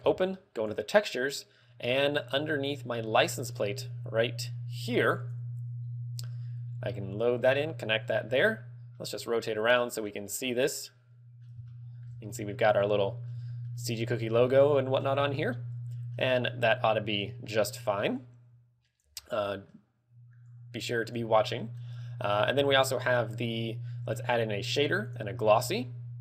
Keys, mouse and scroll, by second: 5.8 click, 7.5 click, 9.1 middle click, 10.5 middle click, 11.9 shift+middle click, 12.4 scroll up 1, 13.1 middle click, 13.8 middle click, 14.6 shift+middle click, 15.5 shift+middle click, 18.3 click, 19.3 scroll down 3, 19.6 middle click, 20.6 click, 21.7 middle click, 22.7 shift+a, 25.7 g.